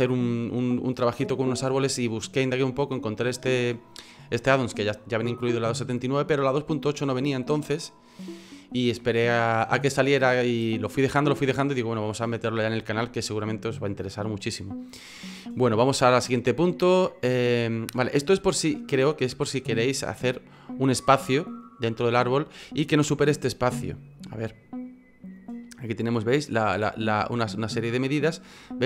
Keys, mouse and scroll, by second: 19.9-23.7 scroll down 2, 23.7 F9.